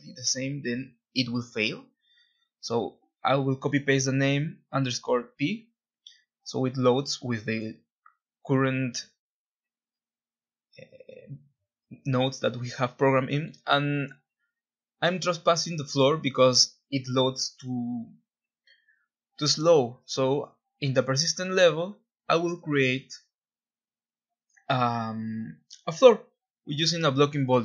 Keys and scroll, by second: 0.0-3.5 typing, 3.8 Return, 4.8-5.6 typing, 7.4-8.2 typing, 9.7 Escape, 16.6-19.0 typing, 20.8-21.6 typing, 23.2-25.3 typing.